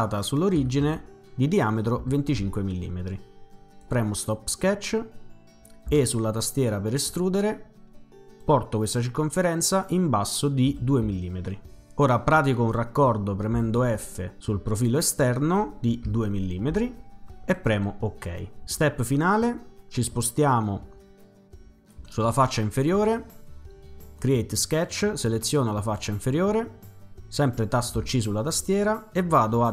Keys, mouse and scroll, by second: 0.4-1.3 typing, 2.0 Return, 3.8 click, 5.9 e, 7.0 click, 8.4-9.7 drag, 10.7-11.0 typing, 11.9 Return, 13.6 f, 14.7 click, 16.1 2, 17.5 click, 24.2 click, 25.8 click, 28.0 c.